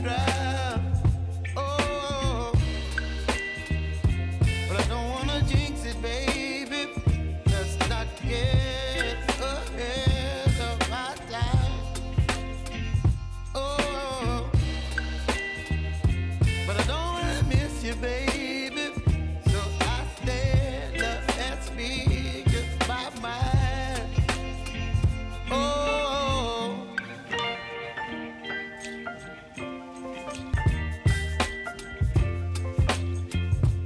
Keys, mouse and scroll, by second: 0.3 alt+click, 1.3 space, 3.7 F5, 4.1 F4, 4.7 click, 5.8 space, 7.2 click, 7.7 space, 9.7 click, 10.8 ctrl+d, 11.6-12.6 typing, 13.5-15.6 drag, 16.2 p, 17.3-19.2 drag, 19.5 ctrl+d, 20.0 p, 20.8-23.4 drag, 23.7 ctrl+d, 24.2 p, 24.9-29.8 drag, 30.3 ctrl+d, 30.8 p, 31.5-33.8 drag.